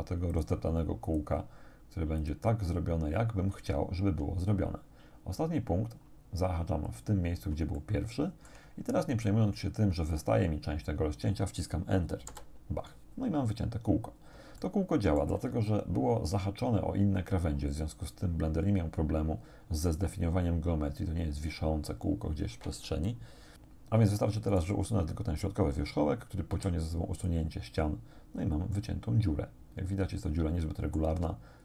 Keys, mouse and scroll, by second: 0.4 shift+click, 2.2 shift+click, 6.9 click, 7.8 shift+click, 12.3 Return, 13.6-13.9 scroll down 2, 14.6 shift+click, 15.9-22.0 right drag, 24.6 right click, 26.6 x, 27.2 click, 28.8-31.2 middle drag.